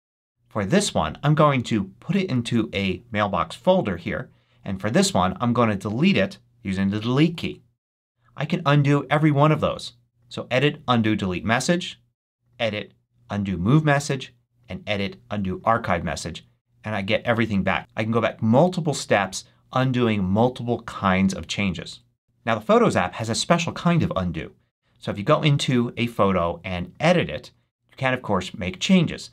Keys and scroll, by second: 7.1 BackSpace.